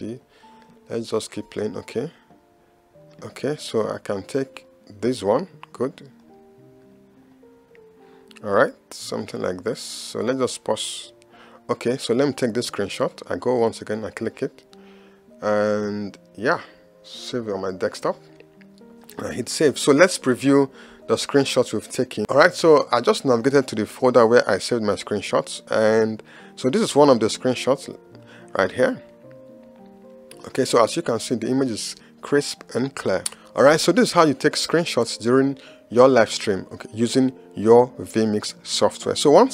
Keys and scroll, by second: 1.5 space.